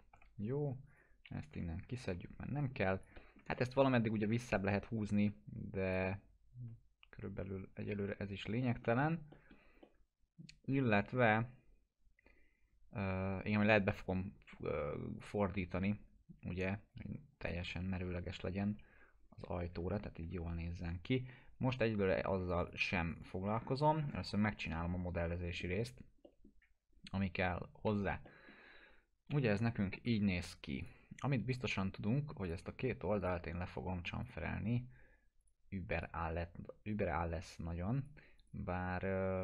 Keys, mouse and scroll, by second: 0.1 F3, 0.9 click, 1.5 Delete, 2.1 1, 2.6-3.5 click, 3.2 alt+middle click, 3.6 F3, 4.5-7.3 drag, 6.0-8.1 alt+middle drag, 8.1 F3, 8.6 alt+middle click, 9.0 F3, 9.3 middle click, 9.6 scroll down 1, 9.8-11.1 alt+middle drag, 13.4 scroll up 1, 15.2 click, 15.7 e, 16.6-17.5 click, 17.6 scroll down 1, 18.6 z, 19.2 scroll down 1, 20.0 ctrl+z, 20.4 scroll up 1, 22.5 click, 23.5 scroll up 1, 24.4 click, 26.2 middle click, 27.9 alt+q, 28.2 alt+middle click, 28.6 scroll down 1, 29.3 p, 29.7-30.1 scroll down 1, 30.8-39.4 drag.